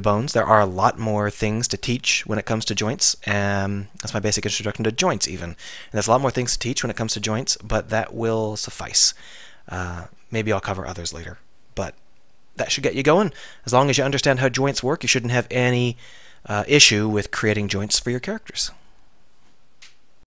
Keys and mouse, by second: 13.3-15.4 middle drag.